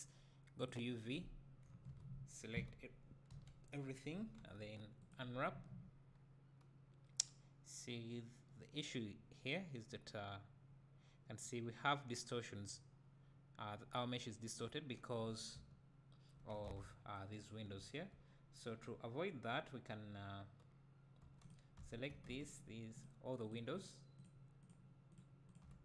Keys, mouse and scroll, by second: 0.6-1.8 drag, 1.8 KP_1, 2.5 a, 3.3 KP_Decimal, 5.1 u, 15.6 `, 15.7-16.3 right drag, 16.7 alt+a, 17.8 `, 18.7-21.2 scroll up 1, 21.3 3, 21.5 click, 21.8 `, 22.5 shift+click.